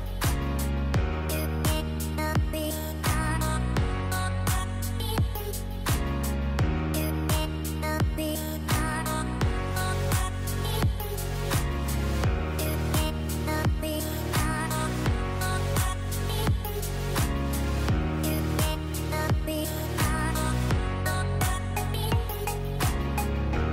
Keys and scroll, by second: 0.5 ctrl+z, 2.7 ctrl+shift+z, 5.5 shift+Page_Down, 16.7 KP_Decimal, 17.0 KP_5, 21.4 BackSpace.